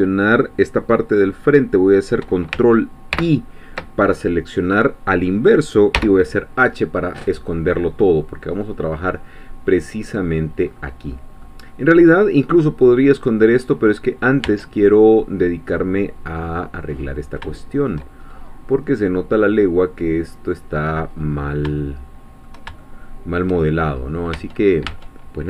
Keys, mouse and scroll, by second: 3.1 ctrl+i, 6.0 h, 8.2-8.6 scroll down 1, 8.6-10.5 middle drag, 10.7-11.1 scroll up 1, 11.4 middle click, 12.5 scroll down 1, 13.2 middle click, 13.7-14.5 scroll up 1, 14.5 Tab, 15.1-16.9 middle drag, 16.9-17.4 scroll up 1, 17.5 shift+middle click, 18.2-18.5 shift+scroll up 1, 19.3-19.7 scroll down 1, 21.2-21.7 scroll up 1, 21.8 shift+middle click, 22.8 shift+middle click, 23.9 shift+scroll up 2, 24.3 Tab.